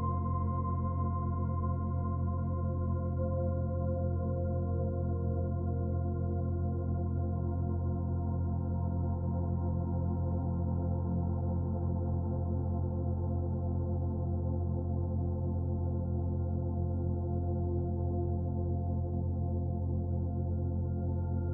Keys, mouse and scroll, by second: 7.4 ctrl+r, 12.1 ctrl+r, 15.3 ctrl+r, 19.7 ctrl+r.